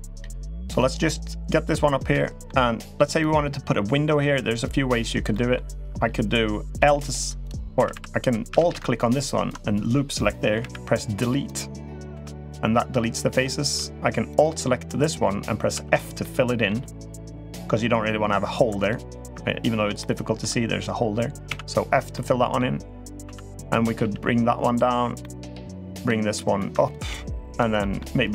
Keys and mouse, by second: 0.5 click, 1.9 middle click, 3.0 click, 5.1 middle click, 6.5-8.4 typing, 7.2 click, 8.7 alt+click, 10.3 Delete, 12.0 2, 12.2 click, 15.5 f, 16.0 middle click, 17.3 click, 18.6 alt+click, 19.7 shift+middle click, 21.2 f, 21.9-22.3 middle drag, 23.0 2, 23.4 click, 23.8 g, 25.0 middle click, 25.8 click, 26.5 3, 26.6 click, 26.8 g, 27.6 middle click, 28.2 click.